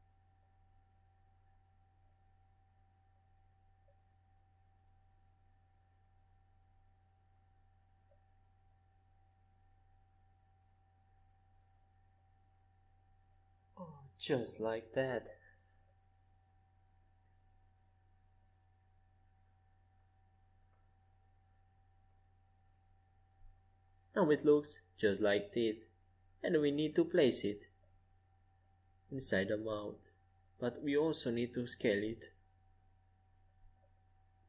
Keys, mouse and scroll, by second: 1.6-5.3 middle drag, 5.3 Tab, 8.6-10.8 drag, 9.3 c, 13.5 g, 17.1 Escape, 17.6 a, 19.3 Tab, 20.6-22.4 drag, 24.3 Tab, 25.0-26.9 middle drag, 25.3 z, 29.0 Tab, 29.8 click, 31.3 click, 31.7-33.5 middle drag, 33.5-34.4 drag.